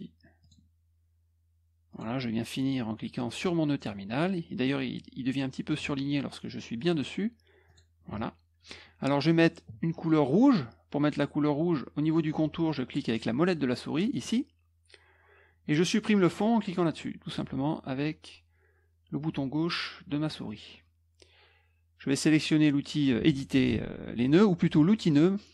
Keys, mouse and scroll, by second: 0.4 click, 1.9 click, 7.6 click, 14.1 middle click, 16.9 click.